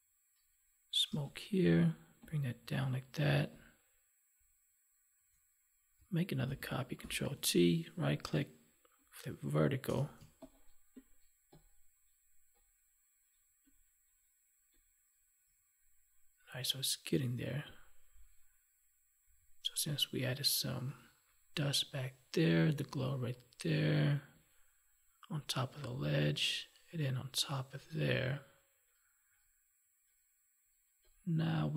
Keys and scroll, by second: 6.4 ctrl+j.